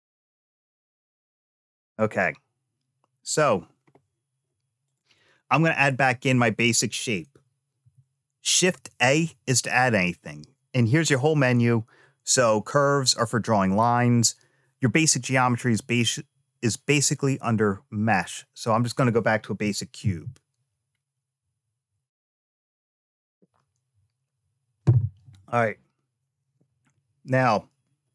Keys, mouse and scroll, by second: 4.6 click, 7.6 shift+a.